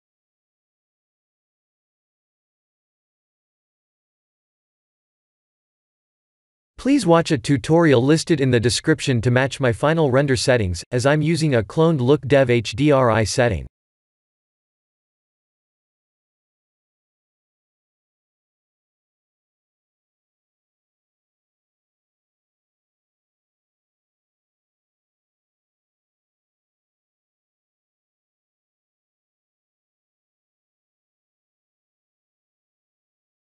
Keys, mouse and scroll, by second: 0.1 shift+click, 10.4-14.7 shift+click, 14.7 click, 16.7 click, 17.2-18.7 scroll down 3, 18.7-19.0 scroll down 1, 19.0 click, 24.6 click, 27.5 click.